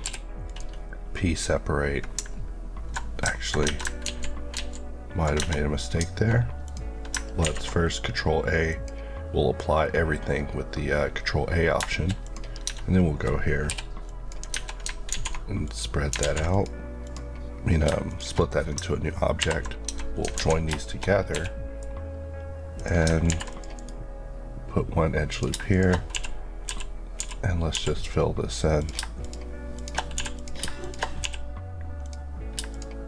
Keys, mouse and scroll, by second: 0.0 p, 0.4 click, 3.6 Tab, 4.0 ctrl+z, 5.4 Tab, 6.7 click, 7.4 a, 8.7 click, 12.6 Tab, 13.7 p, 14.0 click, 14.5 Tab, 15.1 alt+z, 15.6 click, 16.2 alt+z, 16.5 click, 18.4 click, 19.4 ctrl+j, 19.9 Tab, 20.4 alt+z, 20.8 shift+middle click, 21.3 1, 21.4 middle click, 22.7 click, 23.3 ctrl+r, 23.5 click, 23.7 right click, 24.6-25.3 scroll up 1, 25.3 click, 25.7 shift+click, 26.1 shift+f, 28.8 shift+click, 29.7 shift+Left, 30.1 f, 30.4 click, 31.2 f, 32.0 click.